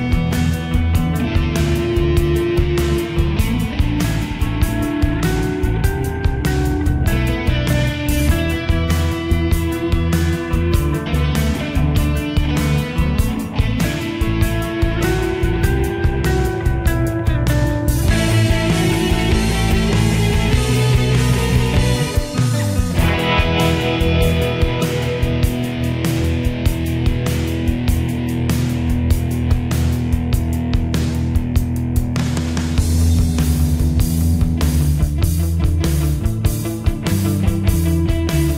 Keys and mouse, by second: 6.9 click.